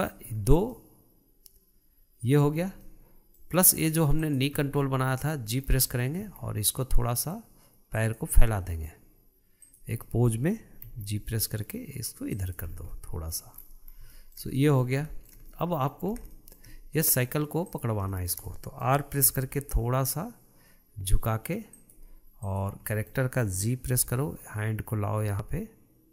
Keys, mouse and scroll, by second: 0.8-1.2 scroll down 2, 1.2-3.0 middle drag, 3.0 scroll up 2, 3.3-4.7 middle drag, 4.7 click, 5.0 scroll down 1, 5.3-6.7 middle drag, 6.7 g, 8.9-10.1 middle drag, 10.1 drag, 10.5 middle click, 11.3 g, 13.2 scroll down 1, 13.4 middle click, 14.0-14.3 scroll up 2, 14.6-16.6 shift+middle drag, 16.6 scroll up 1, 16.8-18.1 shift+middle drag, 18.1 click, 18.5-19.7 shift+middle drag, 19.7 r, 22.9 click, 23.4-24.5 middle drag, 24.5 g.